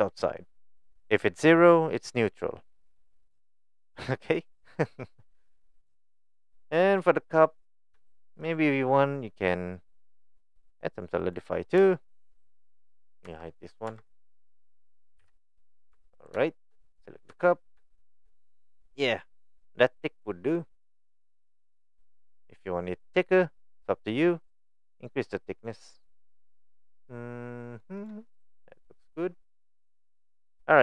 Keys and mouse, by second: 1.5-2.9 drag, 4.8 click, 5.6-6.2 middle drag, 6.8 middle drag, 8.1 shift+middle drag, 9.4-11.3 drag, 11.9 shift+middle drag, 13.3 Tab, 13.9 Tab, 14.2 click, 15.2 h, 15.9 Tab, 16.5 shift+middle click, 17.3 Tab, 18.2 shift+middle click, 20.4-22.3 middle drag, 25.7 click, 26.9 middle click, 28.3-29.7 middle drag, 29.9 middle click.